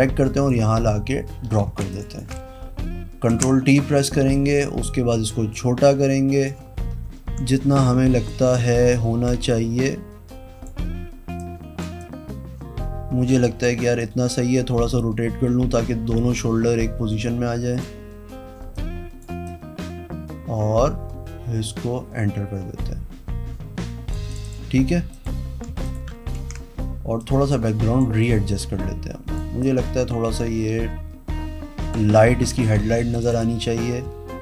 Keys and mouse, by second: 1.6 z, 1.9 alt+click, 3.2 ctrl+t, 4.3 click, 5.4-6.4 drag, 8.2-9.2 drag, 9.4-10.6 drag, 11.4 click, 12.0 click, 13.9 click, 17.7 click, 18.7 click, 19.4-24.1 drag, 24.3 click, 25.1 click, 25.8 shift+click, 26.3 ctrl+t, 27.1 click, 28.2-29.3 drag, 29.6-31.9 drag, 33.1 click.